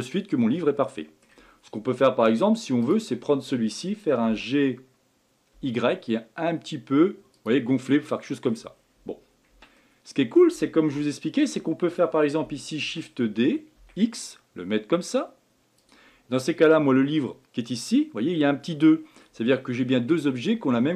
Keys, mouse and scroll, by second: 2.8 click, 4.3 g, 7.7-8.8 middle drag, 8.8 scroll down 2, 9.5 Tab, 9.8-12.8 middle drag, 12.8 shift+d.